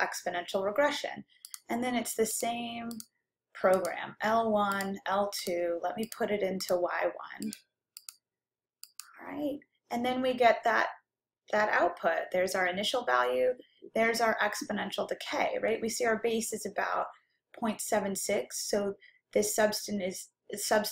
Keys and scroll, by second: 2.6 1, 3.2 ,, 5.0 2, 5.7 ,, 6.7 Right, 7.5 Return, 8.1 Return, 9.0 Return.